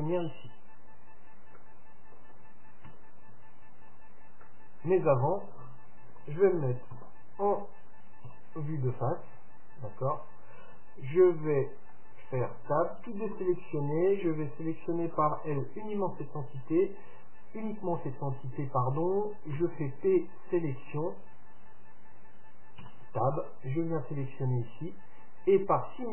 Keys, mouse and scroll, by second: 1.3-1.7 scroll down 1, 1.7-3.5 middle drag, 3.0 z, 4.5-7.9 middle drag, 7.0 KP_7, 8.4 KP_3, 12.0 Tab, 13.4 a, 15.6 l, 19.7 p, 22.9 Tab, 23.5-25.4 right drag, 24.7-26.1 middle drag.